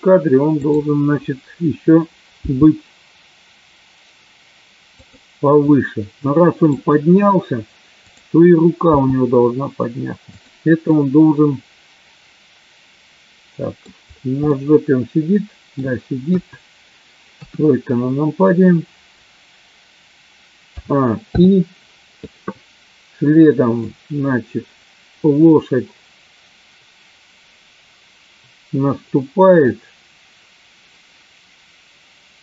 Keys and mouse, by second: 2.4 g, 5.7 middle click, 9.3 g, 10.6 click, 10.9-13.9 middle drag, 14.5-15.9 middle drag, 16.4 KP_1, 21.6 i, 24.3-32.4 drag.